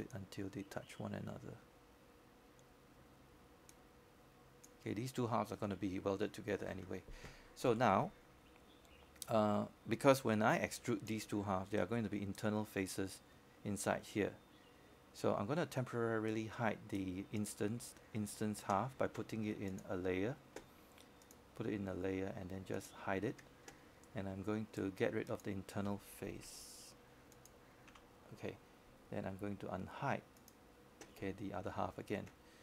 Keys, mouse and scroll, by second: 0.7 w, 0.8 w, 1.6-4.1 drag, 4.3 typing, 5.6-7.1 drag, 7.1-7.8 scroll up 1, 7.8 click, 9.0 w, 9.8-15.1 drag, 20.3 alt+click, 21.6-23.1 right drag, 25.2 scroll down 1, 25.4-26.2 scroll up 1, 26.2 right click, 27.3 click, 28.0-29.2 scroll down 1, 29.7 click.